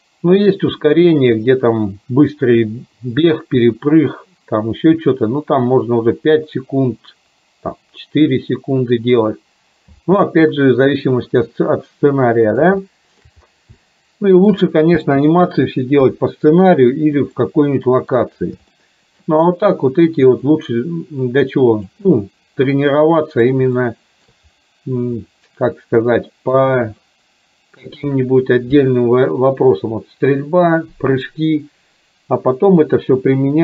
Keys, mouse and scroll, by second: 10.0 space, 10.5-12.6 middle drag, 13.0 shift+middle click, 13.8 shift+middle click, 15.0 space, 16.1 KP_3, 17.5-18.2 middle drag, 18.8-19.3 shift+middle drag, 20.5-22.8 drag, 22.8 middle click, 23.8 shift+middle click, 25.2-26.7 middle drag, 27.1-28.0 middle drag.